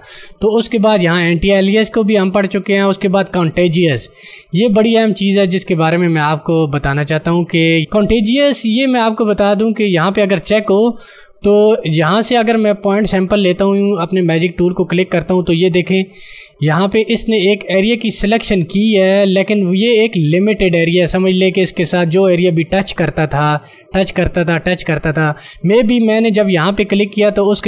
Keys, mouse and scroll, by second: 15.3 click.